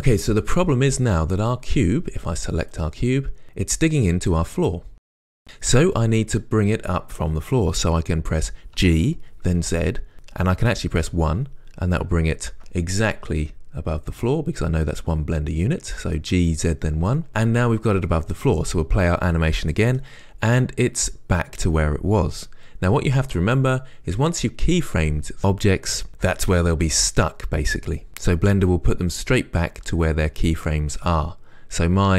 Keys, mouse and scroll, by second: 3.4-20.0 middle drag, 9.0 g, 20.0-32.1 right drag.